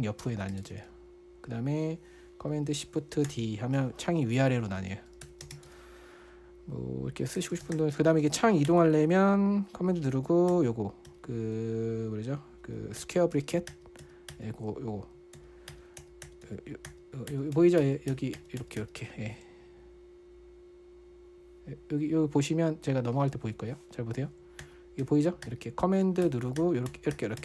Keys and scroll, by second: 0.6-1.4 typing, 3.7 shift+super+d, 5.2-6.4 typing, 7.5-10.0 typing, 10.9 super+[, 11.5 super+], 13.4 super+[, 13.8 super+], 14.1 super+[, 14.4 super+], 14.7 super+[, 15.8 super+], 16.1 super+[, 16.4 super+], 16.7 super+[, 16.9 super+], 17.3 super+[, 18.0 super+], 18.2 super+[, 18.5 super+], 18.8 super+[, 19.0 super+], 19.2 super+[, 23.7 ↻, 25.0 super+[, 25.4 super+], 25.9 super+[, 26.6 super+], 27.0 super+[, 27.3 super+].